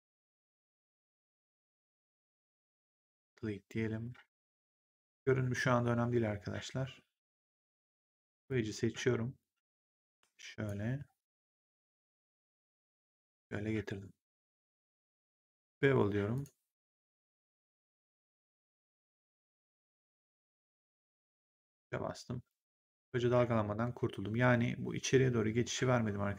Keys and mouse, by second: 0.8 shift+click, 2.9 click, 7.6 right click, 8.1 click, 8.7 w, 10.0 click, 12.8 middle click, 16.2 click, 17.4 click, 18.8 click, 20.8 3, 21.2 right click, 21.6 click.